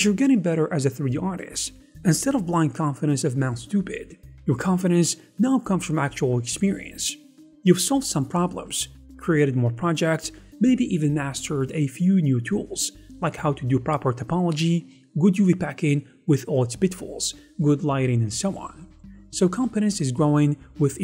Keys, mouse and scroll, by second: 16.5 ctrl+z.